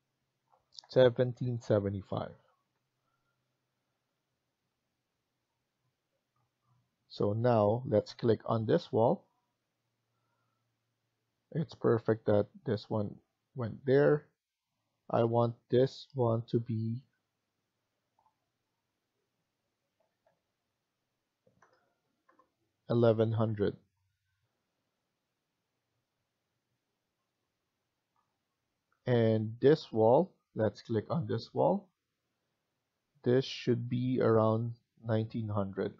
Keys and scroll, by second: 0.3-1.6 typing, 2.5 Return, 5.6 typing, 19.9 1, 20.2 1, 21.5 0, 22.2 0, 23.2 Return, 35.6-35.9 typing.